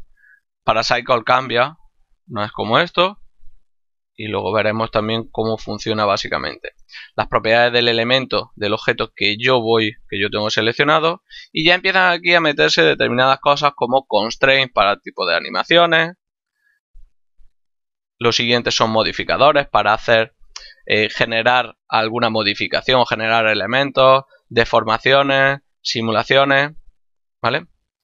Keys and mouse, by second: 4.4 click, 8.5 right click, 11.4 click, 15.5 click, 18.3 click.